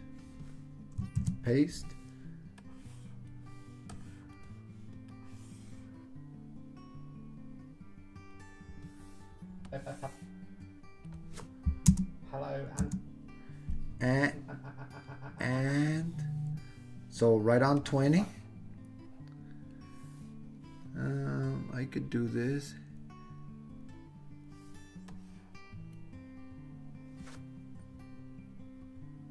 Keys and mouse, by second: 1.2 super+v, 2.6-3.3 drag, 4.0-4.4 drag, 5.2-8.3 drag, 9.8-11.3 drag, 11.9 space, 12.8 space, 14.2-15.7 drag, 17.9-19.8 drag, 25.1-29.3 drag.